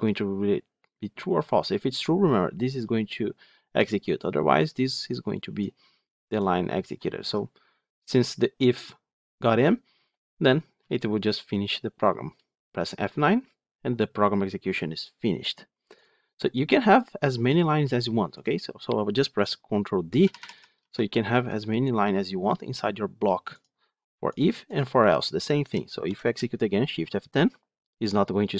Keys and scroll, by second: 7.1 F8, 12.9 F9, 20.1 ctrl+d, 25.9 shift+F10.